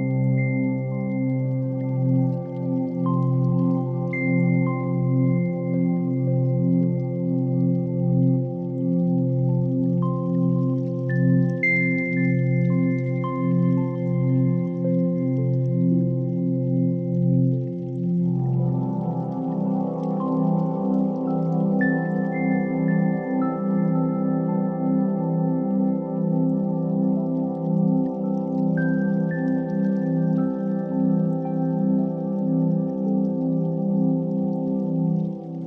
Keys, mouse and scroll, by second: 3.0 click, 5.6-8.0 drag, 8.9-11.5 drag, 12.0-13.5 drag, 16.6 middle click, 17.1 Tab, 18.1 s, 19.7 click, 20.1-22.1 right drag, 22.8 Tab, 23.1 a, 23.5 e, 24.0 z, 24.8 click, 25.5 shift+middle click, 26.1 g, 26.2 z, 27.1 shift+click, 27.5 Tab, 29.3 click, 32.0 click, 33.5-35.6 shift+drag.